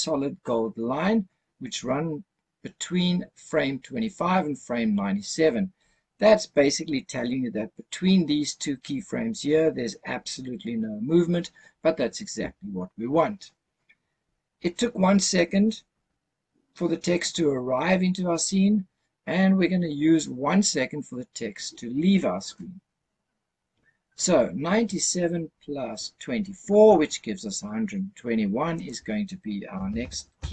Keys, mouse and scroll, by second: 28.7-30.5 drag.